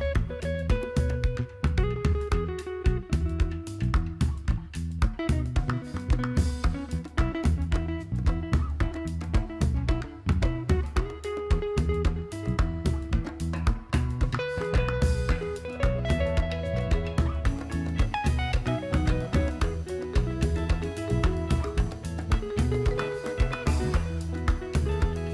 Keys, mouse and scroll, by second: 13.9 click, 17.4 click, 20.2 click.